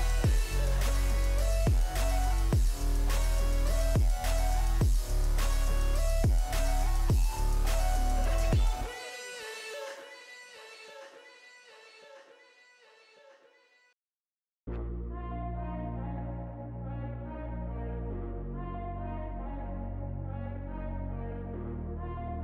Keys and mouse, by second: 0.0 right click, 14.5 right click, 20.0 right click.